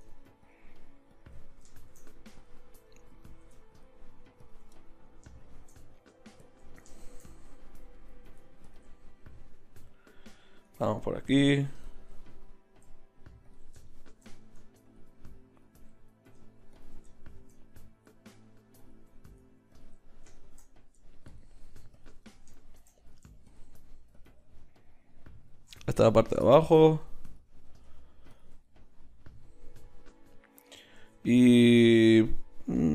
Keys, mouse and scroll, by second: 6.2 middle click, 11.0-18.4 middle drag, 18.8-25.8 middle drag, 31.0 ctrl+z.